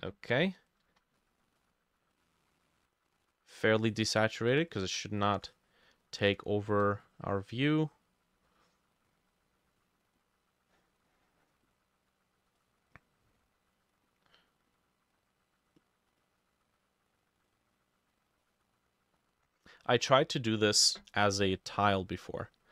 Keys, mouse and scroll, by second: 4.8 shift+click, 6.2 ctrl+z, 6.6 shift+click, 16.2 double click, 18.8 double click, 21.7-22.7 drag, 21.7 middle click.